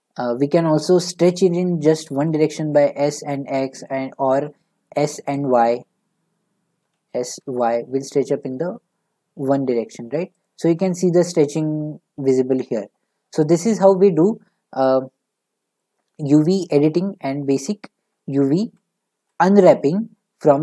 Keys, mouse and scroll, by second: 1.2 s, 2.1 s, 2.7 x, 5.3-6.8 right drag, 6.8 s, 7.4 y, 7.8 right click, 9.5 typing, 10.5 click, 12.5-13.5 scroll down 4, 13.5 click, 15.8 middle click, 18.6 ctrl+z, 19.1 ctrl+z.